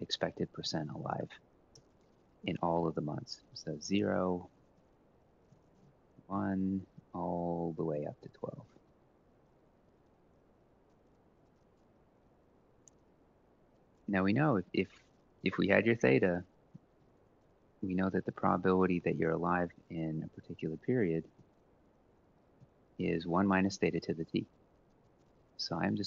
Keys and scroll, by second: 0.0-8.7 typing, 7.7 ctrl+v, 8.5 Right, 9.2 ctrl+c, 9.4 shift+Right, 9.7 shift+Right, 9.9 shift+Right, 10.1 ctrl+v, 11.0 Left, 11.2 Left, 11.4 Left, 11.5 Left, 11.7 Left, 11.8 Left, 12.0 Left, 12.2 Left, 12.4 Left, 12.7 Down, 14.2 typing, 16.5-20.7 typing, 21.1 F4, 22.3 F4, 25.3 F4.